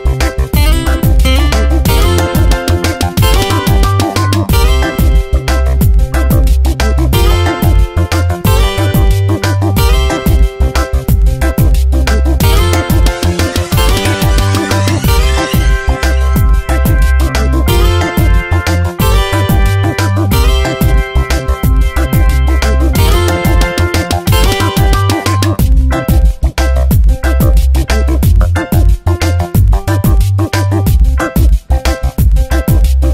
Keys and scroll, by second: 0.0 Return, 1.1 Tab, 4.9 ctrl+t, 6.9 Return, 10.4 F9, 12.9 ctrl+t, 14.5 Return, 15.1 Up, 15.3 Right, 15.8 ctrl+t, 17.6 Return, 18.2 Up, 18.4 Right, 20.0 Up, 20.2 Right, 20.6 Down, 21.1 Right, 21.5 Down, 25.6 ctrl+t, 27.6 Return, 29.1 3, 30.3 ctrl+t.